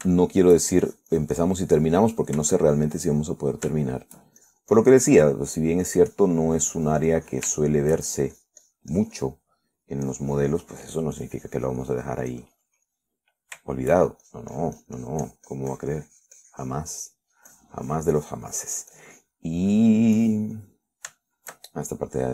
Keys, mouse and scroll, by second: 1.4 shift+middle click, 2.1-3.4 shift+drag, 3.9-5.0 shift+drag, 5.2 shift+middle click, 5.6-6.9 shift+drag, 7.1-8.8 shift+drag, 8.9-11.2 shift+middle drag, 9.3-11.2 shift+drag, 11.5 click, 12.4-14.3 drag, 14.5 middle click, 15.0 shift+middle click, 15.5-18.6 shift+drag, 18.7-21.1 shift+drag, 21.4 click, 21.9 middle click.